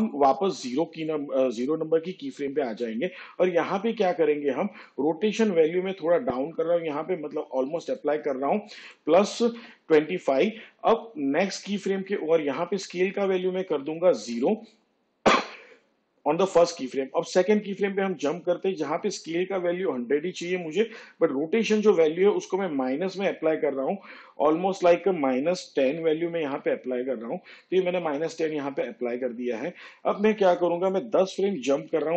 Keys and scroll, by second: 11.7 2, 12.0 5, 16.4 0, 27.5 -, 28.0 1, 28.6 0.